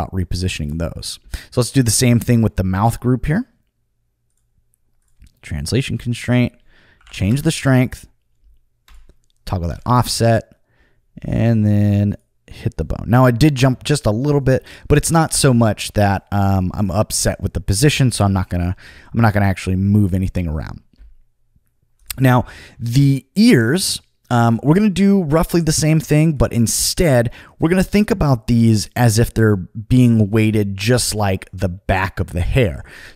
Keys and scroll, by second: 7.0 5, 7.2 Return.